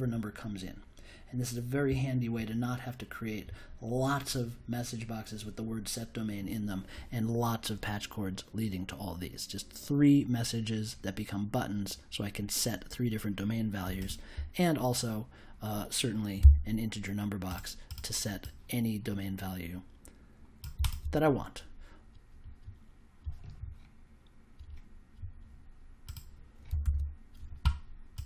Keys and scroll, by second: 16.3 i, 26.8 super+s.